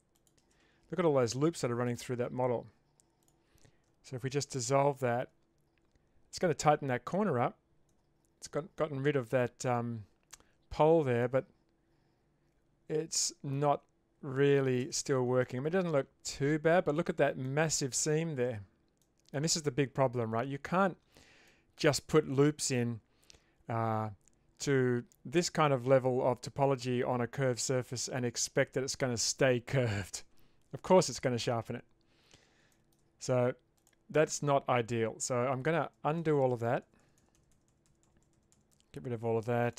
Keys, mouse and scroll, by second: 4.5 ctrl+x, 7.9 Tab, 9.3 Tab, 11.2-13.5 middle drag, 13.7 Tab, 14.8 shift+space, 15.4-16.7 middle drag, 17.5-17.9 middle drag, 19.1 middle click, 20.9 Tab, 21.5 middle click, 22.4-22.8 middle drag, 27.9 middle click, 32.7 shift+middle drag, 33.8 alt+click, 35.9 ctrl+z, 36.2 ctrl+z, 36.4 ctrl+z, 36.5 ctrl+z, 36.7 ctrl+z, 36.8 ctrl+z, 37.0 ctrl+z, 37.2 ctrl+z, 37.4 ctrl+z, 37.5 ctrl+z, 37.7 ctrl+z, 37.9 ctrl+z, 38.0 ctrl+z, 38.2 ctrl+z, 38.3 ctrl+z, 38.5 ctrl+z, 38.7 ctrl+z.